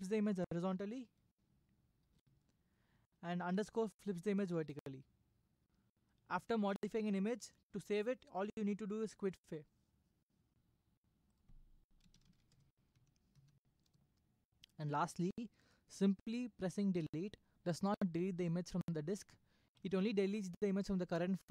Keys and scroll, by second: 2.1 ⊥, 4.6 space, 11.8-12.9 typing, 12.9 Up, 13.4 Up, 13.8 Return, 19.8 Delete.